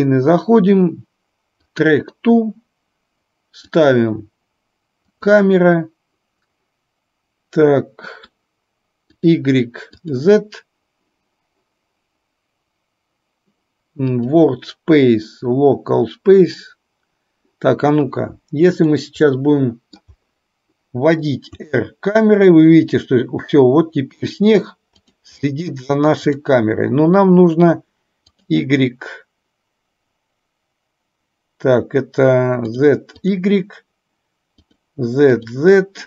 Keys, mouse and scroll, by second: 3.7 click, 9.2 click, 10.1 click, 14.3-17.4 drag, 18.8 click, 19.4-20.2 middle drag, 21.6 r, 28.4 click, 33.3 click, 34.7 click, 35.4 click.